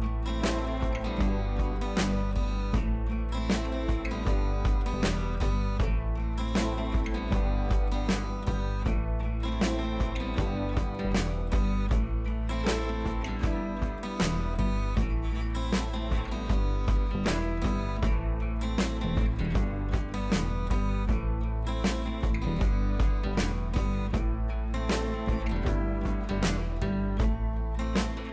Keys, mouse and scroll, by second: 1.5-5.4 drag, 5.4-17.1 alt+drag, 17.1 Right, 19.8 click, 20.6 b, 21.0 click, 21.6 ], 21.8 ], 22.0 ], 22.0 click, 22.6 scroll down 1, 22.8 click, 26.1 scroll down 1, 26.4 scroll up 1, 26.7 ctrl+z, 28.0 click.